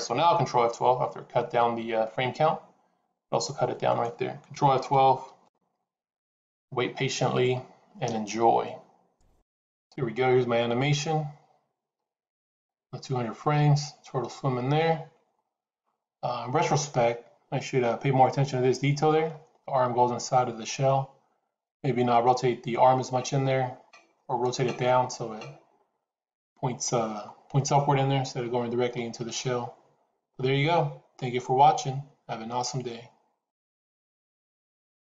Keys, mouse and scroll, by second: 5.3 ctrl+F12.